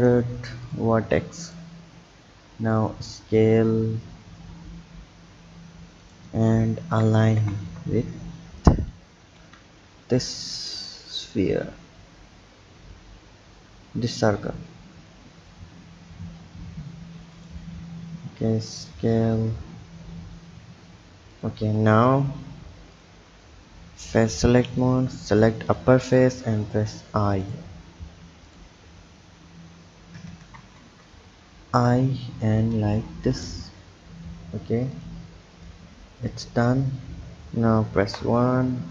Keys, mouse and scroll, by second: 1.4 click, 2.3 s, 6.9 g, 17.7 s, 21.6 Tab, 22.9 click, 24.1 click, 24.8 click, 26.2 i, 28.5 click, 30.5 ctrl+z, 31.5 i, 34.9 drag, 35.7 click, 36.7-38.0 scroll down 2, 38.0 KP_1.